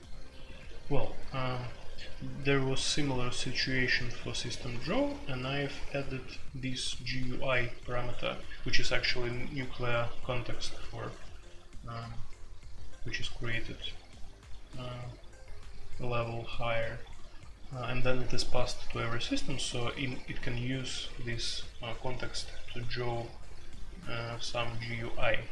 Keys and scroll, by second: 0.0-2.1 typing, 3.5-5.4 typing, 10.1 typing.